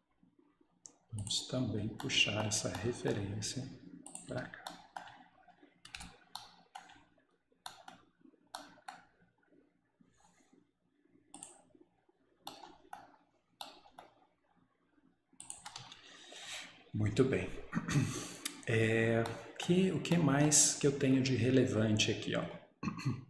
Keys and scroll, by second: 4.4 Escape, 6.0 Return, 10.4 Return, 15.6 Escape, 15.8 Escape.